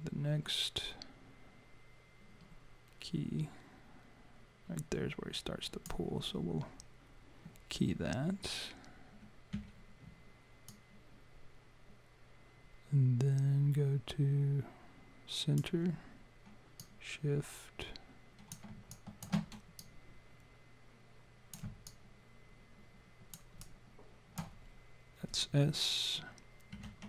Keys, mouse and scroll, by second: 9.5 s, 10.7 click, 16.8 click, 18.9 alt+click, 19.7 click, 21.8 alt+click, 23.6 alt+click, 26.7 s.